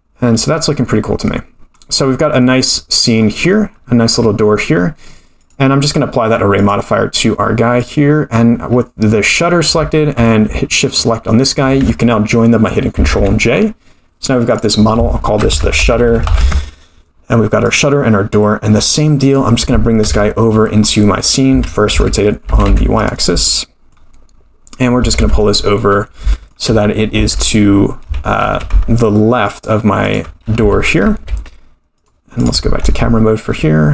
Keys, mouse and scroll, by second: 0.4-0.9 scroll up 8, 0.9-1.4 scroll up 2, 1.4 scroll down 1, 1.5-3.3 scroll down 13, 2.8-3.3 middle drag, 3.3-3.9 scroll down 2, 3.7-4.1 scroll up 2, 4.1-5.3 scroll down 2, 5.3 scroll down 1, 5.4 click, 6.6-7.3 drag, 7.8 click, 8.3-9.7 scroll up 5, 9.7-10.1 scroll up 3, 10.7 shift+click, 13.1 ctrl+j, 14.5 click, 15.9-17.1 drag, 16.0 t, 17.6 click, 18.7-19.2 scroll down 5, 19.2 click, 20.0 KP_7, 20.6-21.3 scroll down 4, 21.4 r, 23.4-24.6 middle drag, 25.2 KP_3, 25.9 scroll up 5, 26.3 shift+middle drag, 27.2 g, 30.6 g, 32.4 drag, 32.9 KP_0.